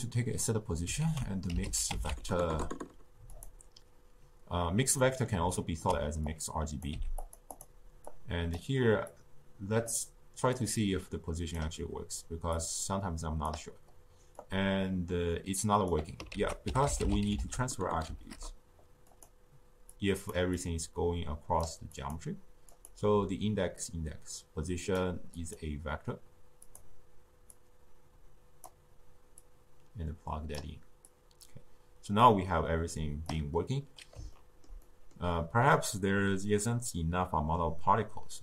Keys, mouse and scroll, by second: 1.0 ctrl+a, 5.0-6.2 middle drag, 6.2-6.9 drag, 6.9 g, 7.5 drag, 8.1 click, 9.1 click, 10.5 drag, 12.5 drag, 14.3-16.3 drag, 16.3 ctrl+a, 20.0 click, 20.5 drag, 21.9-29.4 drag, 31.0-34.1 drag, 34.3 ctrl+middle click, 35.1 scroll up 1, 35.7-38.4 middle drag.